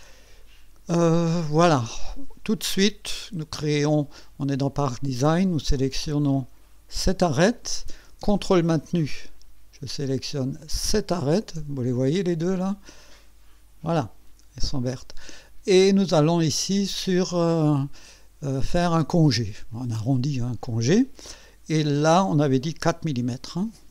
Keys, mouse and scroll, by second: 0.9 click, 3.1 click, 6.9 click, 10.8 ctrl+click, 11.4 ctrl+scroll up 2, 13.1-14.1 right drag, 19.7 click, 23.1 KP_4.